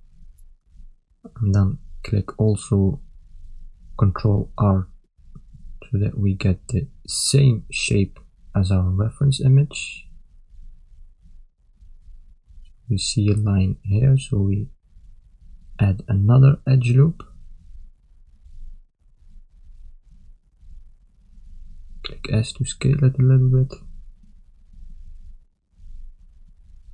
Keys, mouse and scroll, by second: 0.2 ctrl+middle click, 0.9 shift+middle click, 1.6 ctrl+middle click, 2.5 a, 4.0 ctrl+r, 8.0 ctrl+middle click.